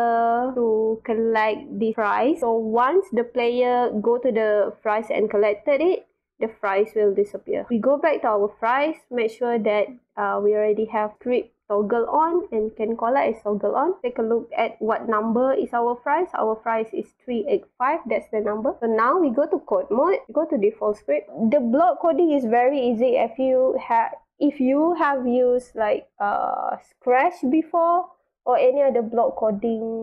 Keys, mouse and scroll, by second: 0.2-0.5 drag, 0.5-1.3 right drag, 1.8 click, 2.2 scroll up 1, 7.6 click, 7.7 click, 14.0-15.4 drag, 17.3 click, 19.5 click, 20.7 click, 23.2 click.